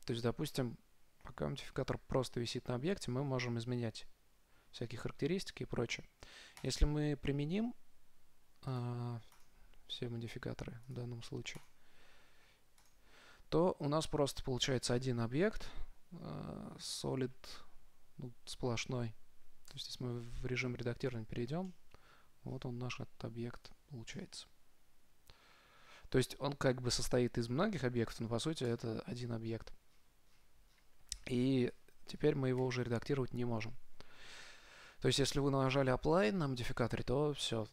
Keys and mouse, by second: 6.8-8.7 drag, 9.0-15.0 drag, 20.1 Tab, 21.5 a, 22.1-26.0 middle drag, 26.4 middle click, 29.0 Tab, 29.4-30.7 middle drag, 32.8 KP_0, 33.8 middle click.